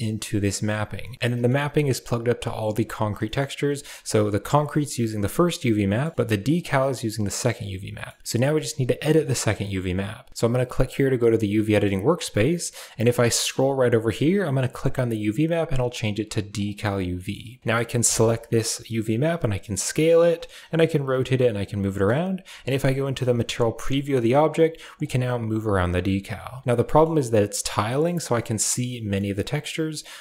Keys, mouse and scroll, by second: 1.0 middle click, 1.1 a, 1.7-2.6 drag, 3.0 middle drag, 3.4 a, 3.4 middle click, 4.2 drag, 5.4 middle click, 6.2 click, 7.8 middle drag, 9.0 click, 11.6 middle click, 14.6-16.4 drag, 17.0 middle click, 17.8 a, 19.1 s, 20.4 r, 21.0 s, 21.8 middle click, 22.2 z, 24.0-26.2 typing, 26.7 middle click, 27.7 middle click, 28.2 middle click, 28.7 middle click.